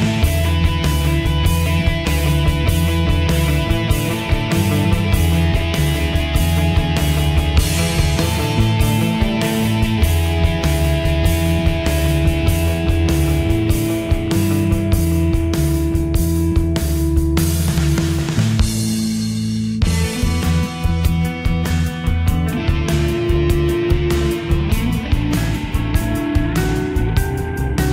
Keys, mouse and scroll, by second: 22.9 click, 27.3-27.9 drag.